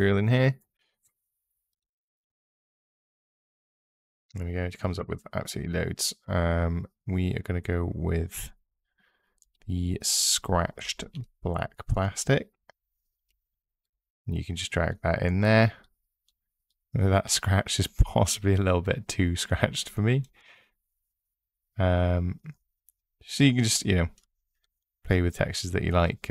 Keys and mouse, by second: 1.5 click, 1.9 click, 9.2 click, 18.9 click, 23.5 click.